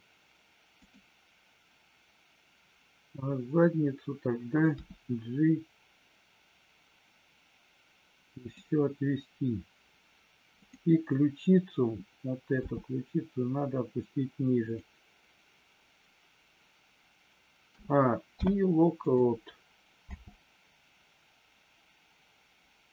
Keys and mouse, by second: 0.7 click, 8.4 click, 10.5 click, 12.6 g, 18.2 i, 20.0 space.